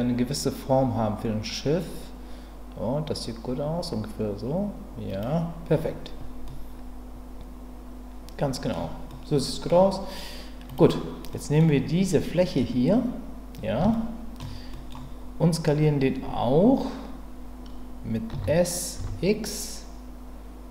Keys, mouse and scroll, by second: 5.1 click, 6.4-8.7 middle drag, 9.1 middle click, 11.3 middle click, 13.9 shift+middle click, 14.7 middle click, 18.3 s, 19.0 x.